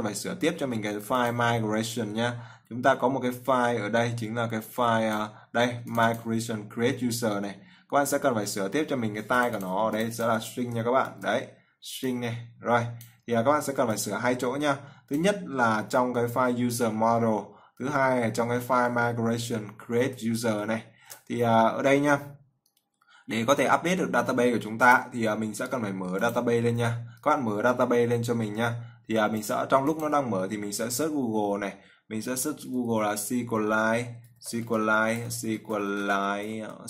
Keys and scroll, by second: 11.3 ctrl+v, 20.9 ctrl+s.